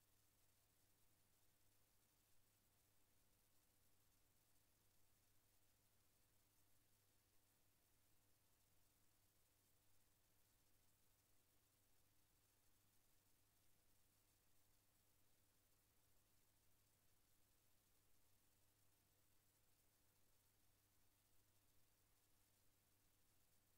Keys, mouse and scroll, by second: 1.1 click, 2.5 KP_Enter, 4.5 click, 6.5 click, 9.0 KP_Enter, 11.9 click, 12.9 KP_Enter, 15.4 click, 16.1 KP_Enter, 17.7 click, 22.2 click, 23.7 click.